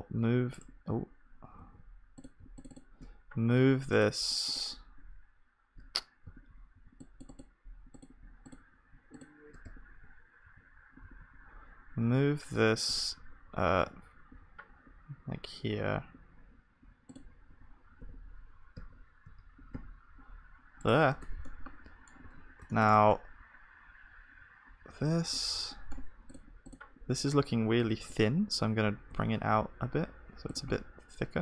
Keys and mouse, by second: 1.6 a, 3.3-11.1 drag, 6.2 z, 11.0 z, 12.0 g, 21.2 Tab, 22.2 ctrl+s, 22.9 Tab, 28.0-30.5 drag, 28.0 g.